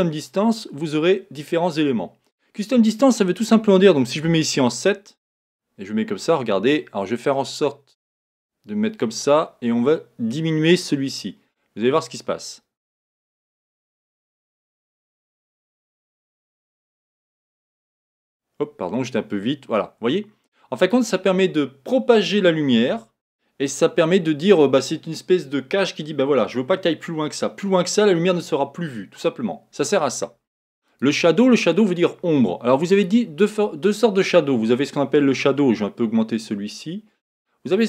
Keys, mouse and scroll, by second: 0.0 click, 1.4-5.4 drag, 5.4-8.4 scroll down 6, 8.4 click, 11.2-14.2 drag, 30.9 click, 33.0-35.4 drag, 36.8-37.8 drag.